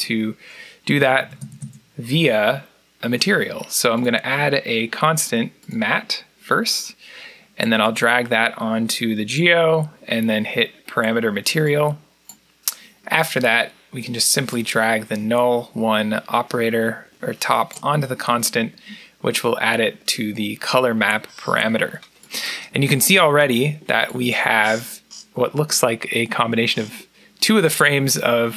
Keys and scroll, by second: 0.8 Tab, 1.0 Tab, 1.2 Tab, 1.5 Tab.